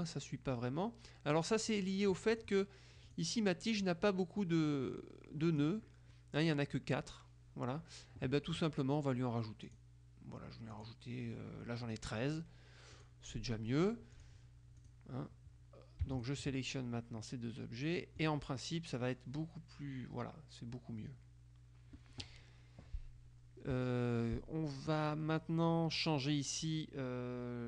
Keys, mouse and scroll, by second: 1.8 click, 2.6 click, 3.2 click, 4.8-6.2 drag, 9.8 click, 10.8 click, 13.0 click, 14.2 click, 16.2 shift+click, 18.2 click, 26.1 click.